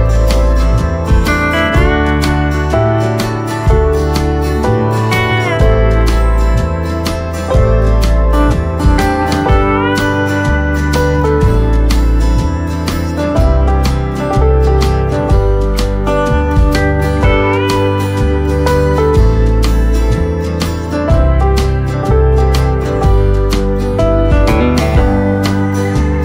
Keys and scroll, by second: 15.2 v, 24.3 Tab, 24.7 space.